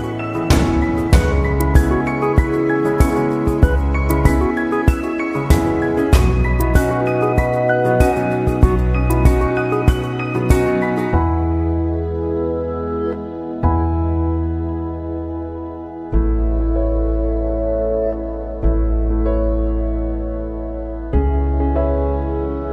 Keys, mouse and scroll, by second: 1.7 click, 7.6 scroll up 2, 8.2 scroll up 2, 14.0-15.1 drag, 20.2 click.